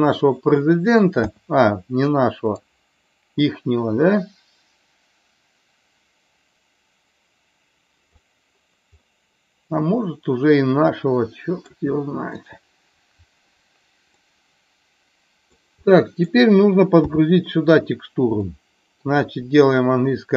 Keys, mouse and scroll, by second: 2.6-8.1 drag, 9.0-11.6 middle drag, 14.1-15.5 middle drag, 15.8 middle click, 17.0 KP_7, 18.5 shift+middle click.